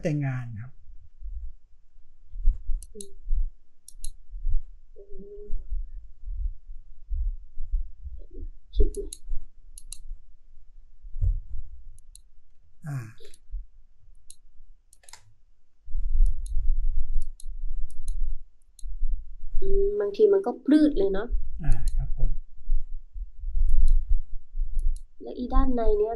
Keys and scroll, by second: 12.5 space.